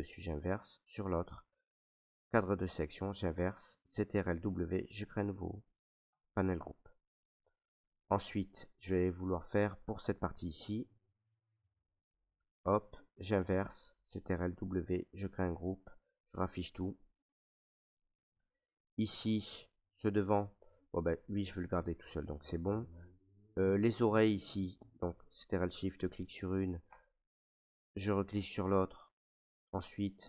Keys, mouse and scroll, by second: 0.2 click, 2.2 click, 4.2 ctrl+w, 6.2 click, 8.0 right click, 8.7 right click, 9.6 alt+right click, 10.3 ctrl+right click, 10.8 click, 11.4 right click, 12.0 right click, 12.9 right click, 14.5 ctrl+w, 15.7 click, 16.7 ctrl+right click, 17.9 click, 18.9 ctrl+right click, 19.4 alt+right click, 20.2 click, 21.1 click, 22.2 click, 22.9 click, 24.3 click, 27.0 click.